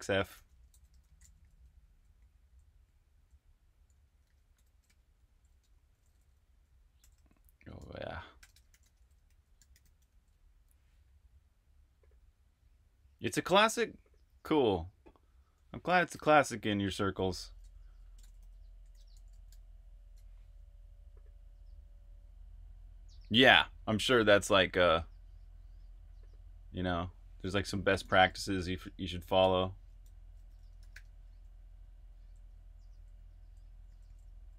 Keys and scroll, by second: 0.0-5.5 typing, 6.7-9.7 typing, 11.9 typing, 16.1-19.9 typing, 16.8 Escape, 21.1 typing, 27.4-34.5 typing.